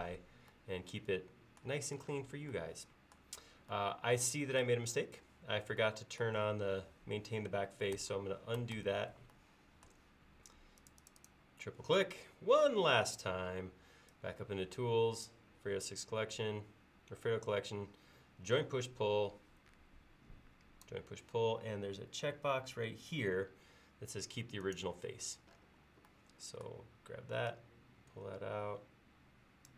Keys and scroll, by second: 8.0 super+z, 8.8 super+z.